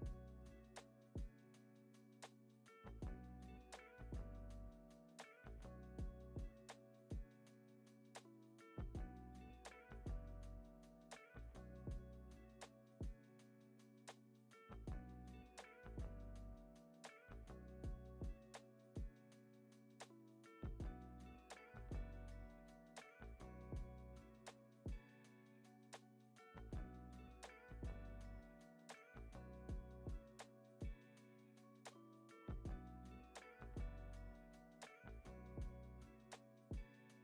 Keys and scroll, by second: 0.1 F9, 5.2 super+s, 5.7 space, 7.1 space, 7.3 super+s, 11.8 n, 12.2 s, 13.2 super+s, 14.4 super+a, 16.2 r, 18.6 super+s, 23.5 u, 25.0 super+c, 29.1 r, 32.6 r, 34.3 x, 37.0 super+v.